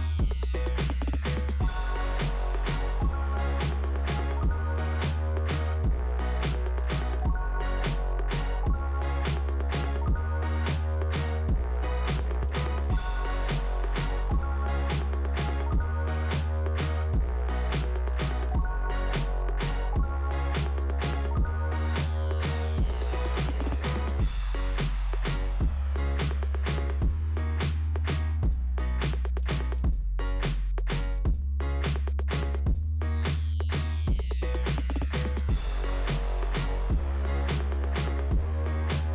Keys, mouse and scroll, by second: 4.7 click, 7.7 click, 7.8 click, 8.6 click, 10.4 click, 14.5 scroll up 1, 16.9 click, 18.8 click, 27.1 click, 28.1 click, 31.3 click, 35.0 scroll up 2, 36.6 click, 37.6 right click, 38.2 click, 38.4 click.